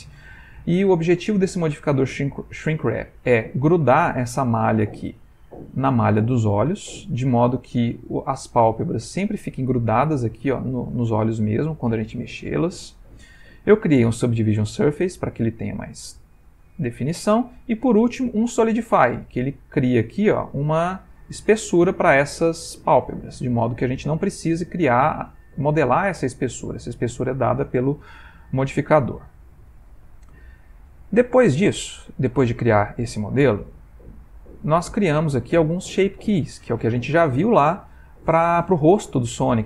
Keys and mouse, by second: 0.3 middle click, 2.9 Tab, 3.4 middle click, 5.2 Tab, 5.8 middle click, 6.5 click, 7.3 click, 7.9 middle click, 9.8 middle click, 11.4 middle click, 14.4 middle click, 17.6 middle click, 19.2 click, 23.7 middle click, 32.5 middle click, 34.3 click, 37.8 middle click.